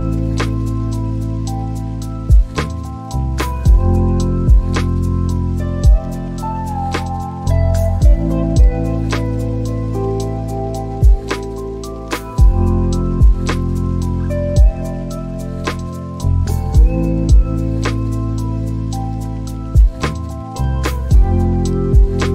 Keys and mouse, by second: 7.6 Escape, 10.2 middle click, 14.2-22.3 drag.